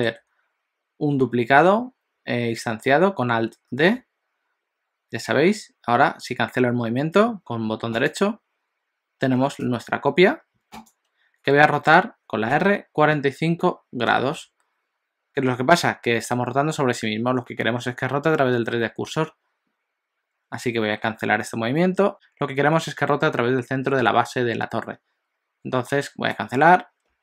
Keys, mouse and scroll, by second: 3.9 alt+d, 9.6 g, 12.6 r.